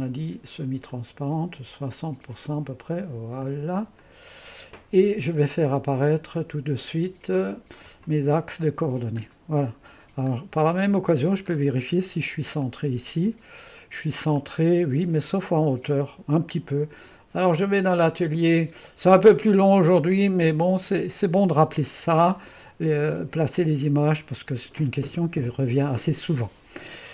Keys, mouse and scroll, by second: 0.9-4.6 drag, 6.3-9.2 drag, 9.2-10.7 scroll up 1, 10.7 click, 11.6-12.7 scroll up 1, 12.7 click, 13.4-14.4 scroll up 1, 14.4-18.0 drag, 18.1-20.3 drag, 24.0-25.2 drag.